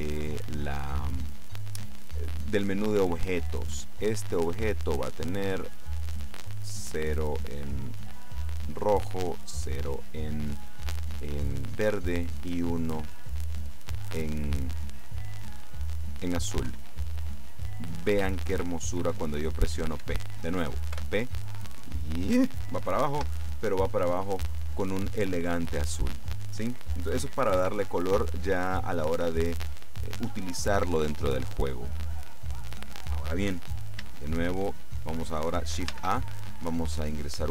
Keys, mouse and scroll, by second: 0.5-1.2 scroll down 1, 4.3 click, 5.8-7.2 drag, 7.8-9.8 drag, 16.8 p, 20.1 Escape, 21.0 p, 23.3 Escape, 36.0 shift+a.